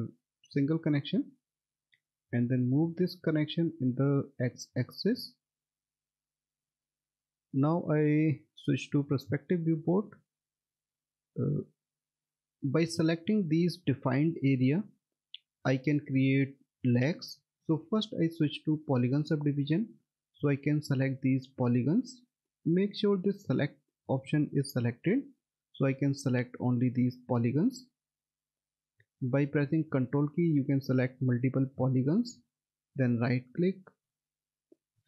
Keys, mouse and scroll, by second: 0.5 1, 1.4 click, 6.3 middle click, 6.9 alt+w, 8.4 alt+middle click, 10.2 middle click, 11.6 middle click, 12.2 alt+middle click, 18.7 click, 30.2 ctrl+click, 33.0 right click.